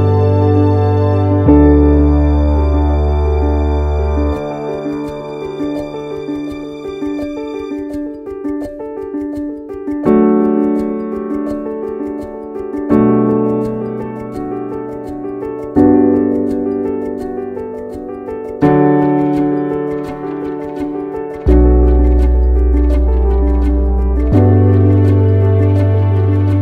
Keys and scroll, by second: 4.5 ctrl+c, 11.4 ctrl+v, 23.0 ctrl+z.